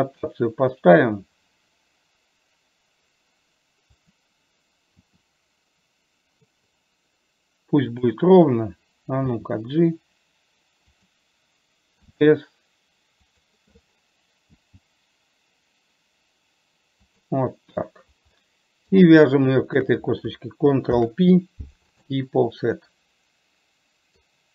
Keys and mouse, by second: 5.2 r, 9.6 g, 12.4 s, 14.9 g, 18.7 middle click, 20.0 shift+click, 21.2 ctrl+p, 23.0 middle click, 23.4-24.5 middle drag.